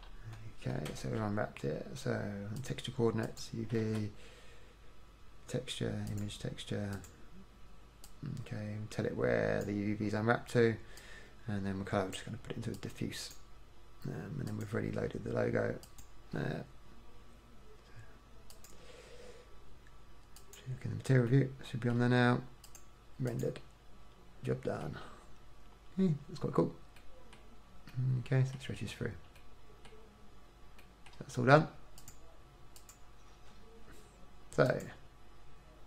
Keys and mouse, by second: 1.2 shift+a, 4.0 shift+a, 8.3-10.2 drag, 11.2-16.6 drag, 18.7 click, 20.8 typing, 21.5 middle click, 22.2 middle click, 22.8 click, 22.8 typing, 25.4 middle click, 29.9 middle click, 34.9-35.3 typing.